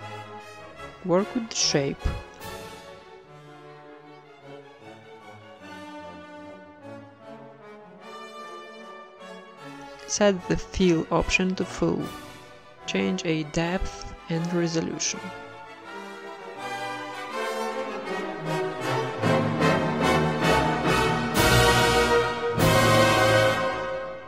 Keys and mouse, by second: 0.7 right click, 0.8 r, 1.2 g, 1.7-2.7 right drag, 2.3-6.9 typing, 4.9 click, 7.2 Tab, 8.1-9.7 drag, 10.6 click, 11.6-12.6 drag, 12.7-13.7 drag, 14.9 Tab, 15.2 right click, 15.4 alt+s, 16.3 alt+s, 17.3 alt+s, 18.0 g, 18.7 g, 19.1 Tab, 19.3 z, 19.5 middle click, 20.5 middle click, 21.4 z, 21.8 KP_1, 22.4 middle click, 23.1 z, 23.5 middle click, 24.1 Tab.